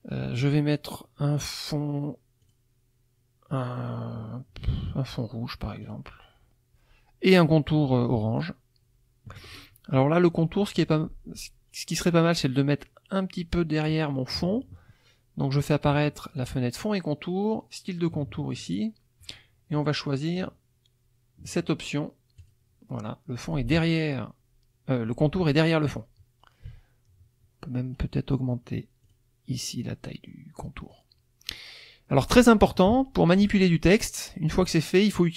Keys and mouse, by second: 2.4 click, 5.8 click, 8.4 shift+click, 16.3 click, 22.4 click, 27.9 right click, 29.0 click, 30.3-31.1 middle drag.